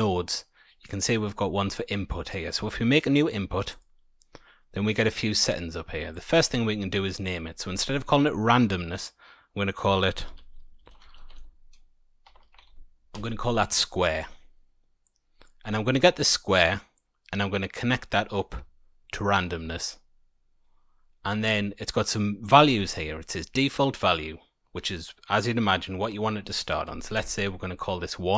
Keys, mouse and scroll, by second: 3.6 click, 6.1 click, 6.3 click, 12.3 BackSpace, 15.0 click, 16.9 click, 26.4 click.